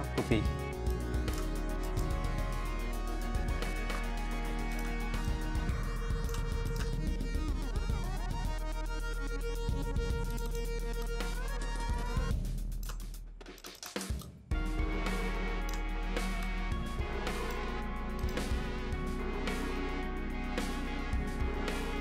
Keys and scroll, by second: 15.2 v, 21.9 p.